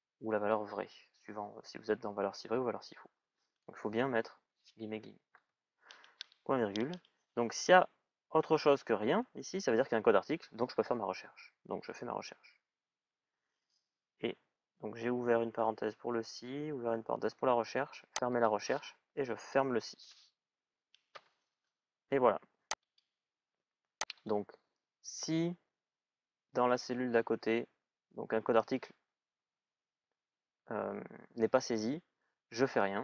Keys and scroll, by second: 20.7 shift+i, 20.8 Return.